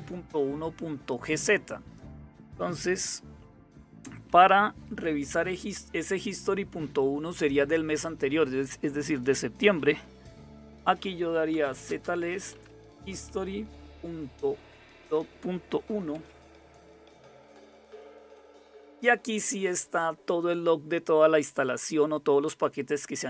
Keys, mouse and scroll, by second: 0.6-2.9 drag, 2.9 Down, 9.9-12.5 typing, 14.5-17.1 typing.